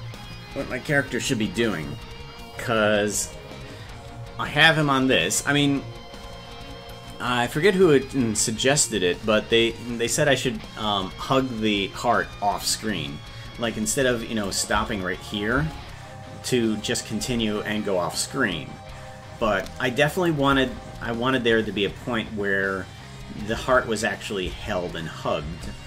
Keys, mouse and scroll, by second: 14.5 click, 14.7 space, 15.8 space, 20.2 click, 20.5 space, 25.1 space.